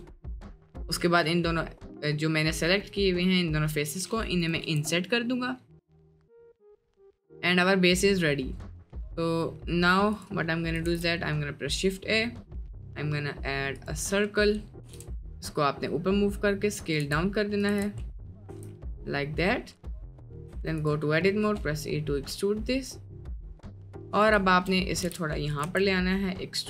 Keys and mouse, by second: 0.2 click, 0.9 middle click, 1.5 middle click, 1.9 middle click, 2.5 middle click, 3.7 i, 4.7 Tab, 4.9-5.4 middle drag, 5.7-6.3 middle drag, 6.8-8.0 middle drag, 8.4 middle click, 9.0 middle click, 10.9 shift+a, 14.9 g, 17.0 a, 17.7 ctrl+z, 18.1 click, 18.5 s, 20.5 Tab, 20.9-21.4 drag, 21.4 e, 24.5 shift+click, 25.1 g, 25.7 s.